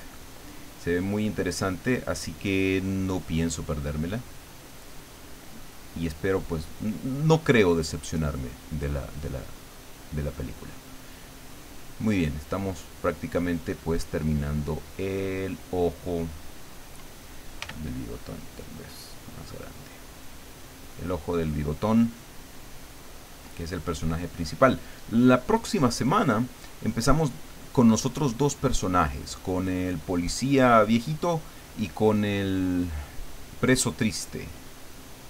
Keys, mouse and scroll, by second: 2.5-4.7 drag, 4.9-8.2 drag, 8.5-11.3 drag, 11.5-13.9 drag, 14.2-16.9 drag, 17.6 f, 18.4 click, 19.1-21.4 drag, 21.6 click, 22.7-24.2 drag, 24.7-26.9 drag, 27.1-28.6 drag, 28.9-31.1 drag, 31.9-34.8 drag, 35.0-35.2 drag.